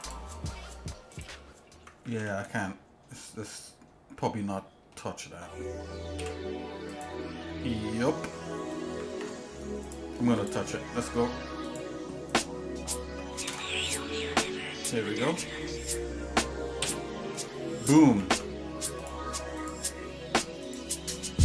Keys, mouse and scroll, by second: 0.0 click, 1.1 ctrl+click, 2.1 ctrl+z, 2.7-4.3 shift+middle drag, 4.6 shift+middle click, 6.2 l, 6.9 click, 7.7 shift+middle click, 9.1 ctrl+Tab, 10.3 click, 11.6 alt+shift+click, 12.4 click, 13.5 ctrl+KP_Add, 14.5 shift+middle click, 15.6 middle click, 16.8 y, 17.5 shift+middle click, 18.2 ctrl+Tab, 19.6 click, 20.6 alt+shift+click.